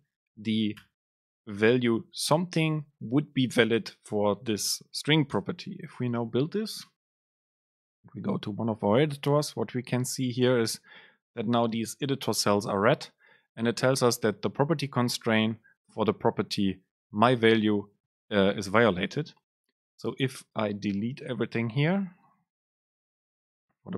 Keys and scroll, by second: 5.4 ctrl+shift+super+F9, 22.2 Right, 22.6 ctrl+shift+super+Left, 23.5 BackSpace.